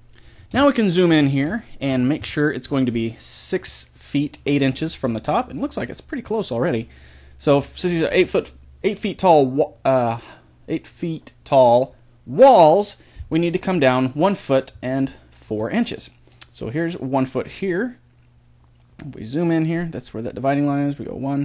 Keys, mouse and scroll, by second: 0.3 middle click, 1.2 scroll up 1, 3.2-21.4 middle drag.